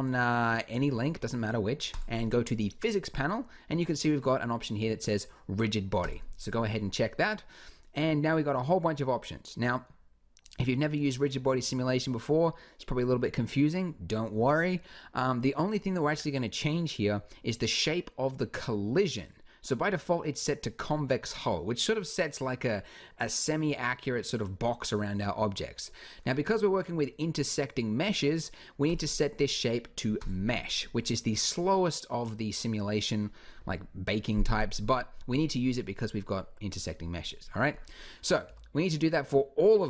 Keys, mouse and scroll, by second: 0.5 click, 3.4 click, 5.8-7.1 drag, 30.5-33.4 middle drag, 38.2 b, 39.6 b.